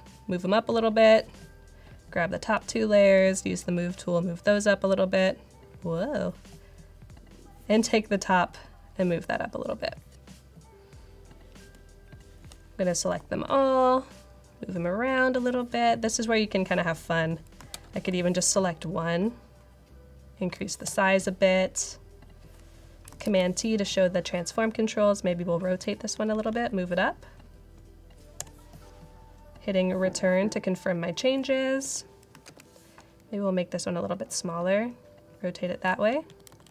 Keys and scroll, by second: 13.0 v, 17.8 super+t, 20.8 Return, 23.2 super+t, 26.0 Page_Up, 26.2 Page_Up, 26.4 Up, 28.3 Return, 31.7 v, 32.4 super+t, 36.0 Page_Up, 36.2 Page_Up, 36.4 Left, 36.5 Left.